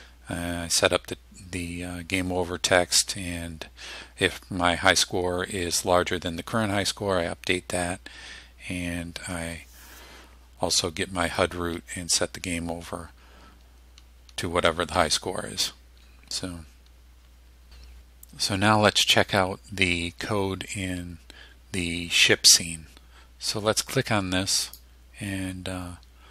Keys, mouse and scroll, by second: 8.1-8.4 scroll down 2, 24.7 click.